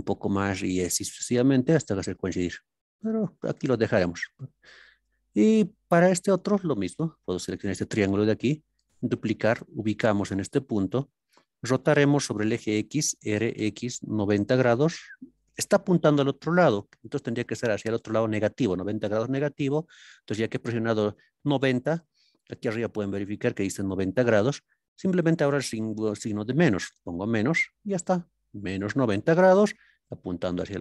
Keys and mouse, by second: 5.2 shift+middle click, 7.5 click, 8.8 shift+d, 10.9 click, 13.5 x, 14.2 KP_9, 14.4 KP_0, 26.9 KP_Subtract.